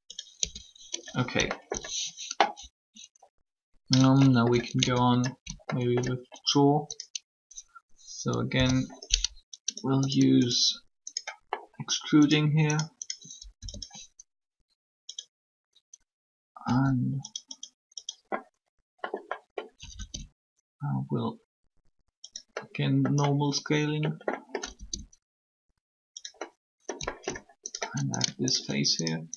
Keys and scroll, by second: 0.4 Tab, 4.8 shift+Tab, 8.5 o, 16.6 s.